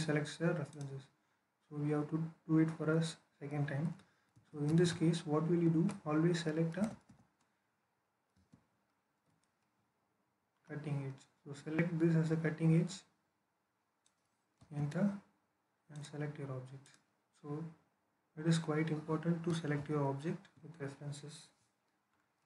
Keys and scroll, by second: 4.2 ctrl+z, 4.5 ctrl+z, 5.5 Escape, 6.6 typing, 8.2 space, 14.4 space, 20.4 Escape.